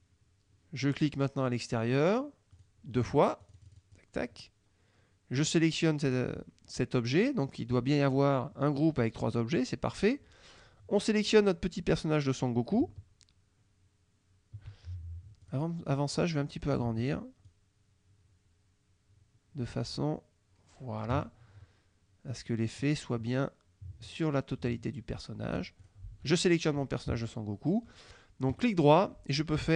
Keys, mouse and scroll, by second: 2.6 click, 3.5 click, 6.1 click, 15.5 click, 16.0 click, 17.5-21.2 ctrl+shift+drag, 25.9 shift+click, 28.6 right click.